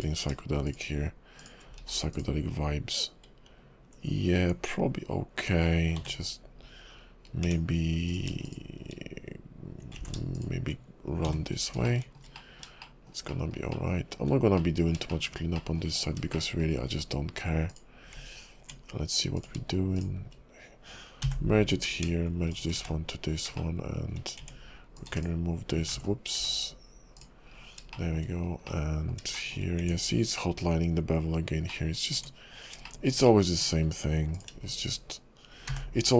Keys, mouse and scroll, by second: 0.0 click, 0.7 shift+click, 1.4 shift+click, 1.8 x, 6.0 j, 7.4 Tab, 8.1 click, 8.5 shift+click, 10.1 ctrl+shift+z, 10.3 shift+click, 11.4 j, 11.9 shift+middle click, 12.4 middle click, 12.8 shift+middle click, 13.3 shift+middle click, 13.7 shift+middle click, 14.6 middle click, 15.1 shift+middle click, 15.5 shift+middle click, 16.2 scroll down 4, 16.3 shift+middle click, 18.1 Tab, 18.1 click, 19.4 click, 20.0 shift+click, 21.4 j, 21.8 click, 22.5 click, 23.0 1, 23.6 shift+middle click, 24.4 Tab, 24.9 click, 25.1 x, 26.1 ctrl+z, 26.3 x, 27.5 scroll down 3, 27.9 shift+middle click, 28.3 scroll up 3, 28.7 middle click, 29.4 shift+middle click, 29.8 Tab, 31.7 middle click, 32.2 Tab, 32.8 shift+middle click, 33.2 middle click, 33.8-34.3 scroll up 2, 34.3 click, 34.7 shift+click, 35.8 j.